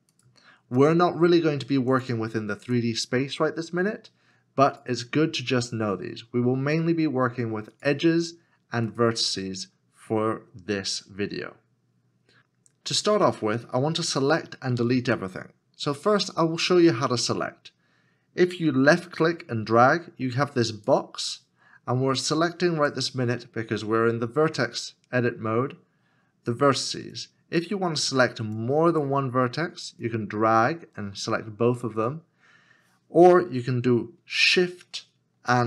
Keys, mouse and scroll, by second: 35.5 shift+click.